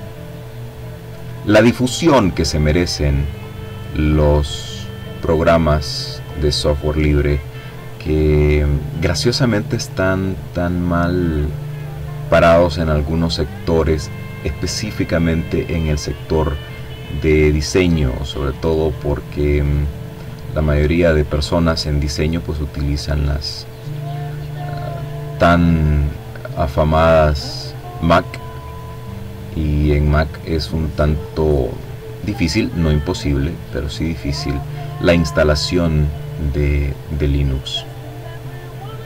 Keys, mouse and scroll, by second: 0.9-3.3 drag, 3.7-5.3 drag, 7.3-9.3 drag, 10.1-13.7 drag, 14.9-16.6 drag, 16.8 click, 19.9-22.0 drag, 22.8 click, 23.8 click, 24.9 click, 26.1 click, 27.1 click, 28.7-30.4 drag, 30.5-32.5 drag, 34.2 click, 37.5 click, 38.9-39.0 drag.